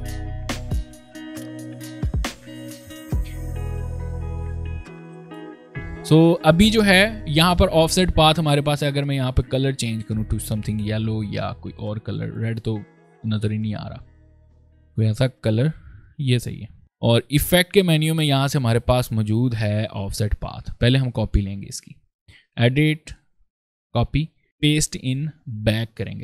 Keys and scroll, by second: 0.0 alt+v, 0.0 ctrl+alt+space, 0.5 ctrl+p, 3.1 ctrl+space, 24.4 ctrl+z.